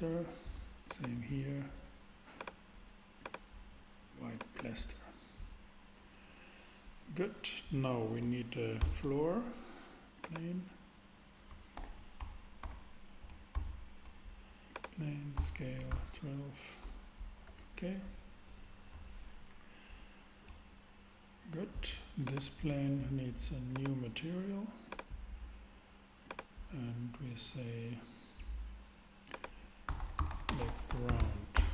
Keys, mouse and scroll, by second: 2.3 super+click, 8.8 shift+a, 9.0 shift+a, 11.7 super+z, 12.6 shift+c, 13.5 shift+a, 15.3 s, 15.8 1, 15.9 2, 17.4 Return, 22.3-23.5 super+drag, 29.8-31.2 typing, 31.5 Return.